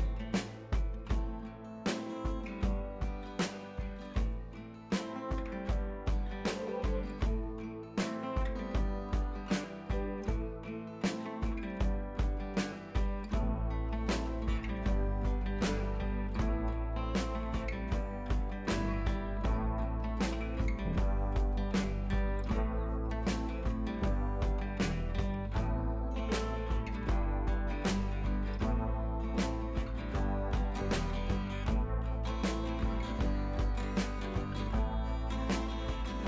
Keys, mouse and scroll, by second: 1.0 scroll down 1, 1.4 scroll up 1, 2.2 click, 4.2 scroll down 1, 4.5 scroll up 1, 5.8 click, 6.5 scroll down 1, 7.6-8.3 scroll up 1, 8.3 click, 9.5 scroll down 1, 9.9 scroll up 1, 10.9 click, 11.6 scroll down 1, 12.1-12.7 scroll up 1, 13.0 shift+F4, 13.4 scroll up 1, 13.7 scroll down 1, 14.2-14.6 scroll up 1, 14.6 scroll down 1, 14.9 scroll up 1, 15.4 scroll down 1, 16.0 shift+F4, 16.5 scroll up 1, 17.6 click, 24.2 ctrl+z, 25.2 click, 26.2 scroll down 1, 27.1 shift+F4, 28.0 scroll up 1, 29.3 click, 31.0 scroll down 1, 32.0 scroll up 1, 33.0 click, 34.5 click.